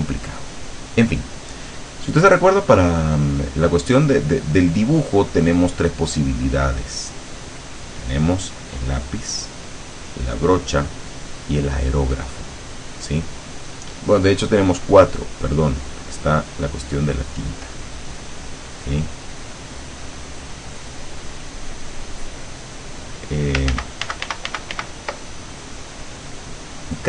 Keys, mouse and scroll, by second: 8.3 click, 9.7 click, 11.1 click, 16.1 click, 17.5-18.5 drag, 19.7-21.3 drag, 21.8 click, 22.7 click, 23.8 ctrl+z, 26.7 click.